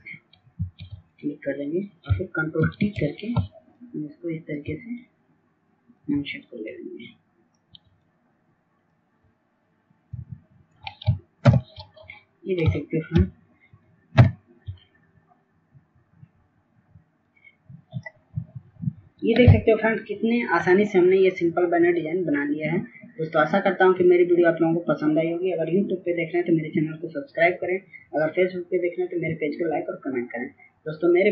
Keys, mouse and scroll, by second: 3.6 ctrl+s, 4.4 ctrl+s, 5.0 click, 6.5 ctrl+t, 7.6 shift+click, 10.6 shift+click, 14.1 shift+click, 15.4 Return, 17.1 ctrl+0, 21.0 click.